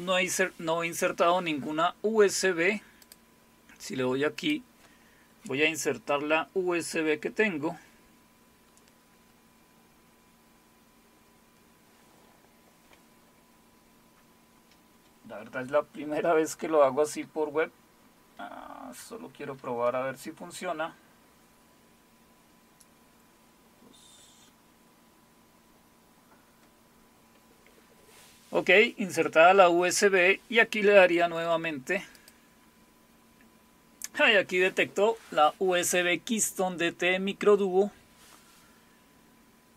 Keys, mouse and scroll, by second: 3.0 click, 4.4 click, 32.1 click.